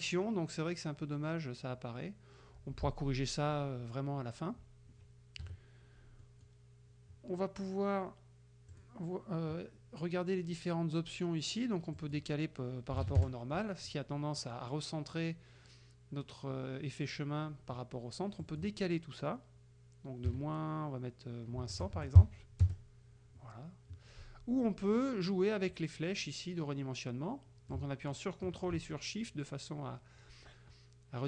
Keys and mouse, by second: 5.5 KP_Subtract, 6.3 click, 8.8 click, 12.0 click, 13.0 KP_5, 13.3 KP_Enter, 18.5 click, 20.4 KP_Subtract, 21.7 KP_1, 21.9 KP_0, 22.7 KP_Enter, 27.8-31.2 ctrl+drag.